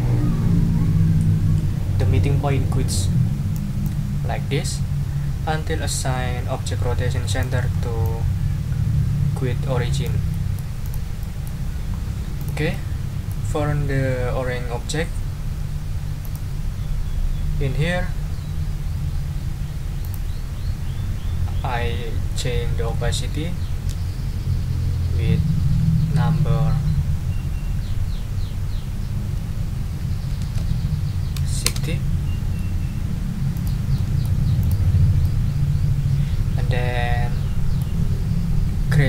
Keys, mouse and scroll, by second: 3.8-7.6 drag, 7.7 ctrl+scroll up 2, 8.0-10.2 ctrl+drag, 10.3 middle click, 10.8 click, 11.2 middle click, 11.5 ctrl+click, 11.9 ctrl+scroll up 2, 12.4 ctrl+click, 12.7 ctrl+click, 16.2 click, 20.0 click, 23.4 ctrl+a, 30.2-31.1 typing, 31.6 Return, 33.5 click, 33.9 middle click, 34.6 click, 35.2 click, 36.0-38.0 middle drag.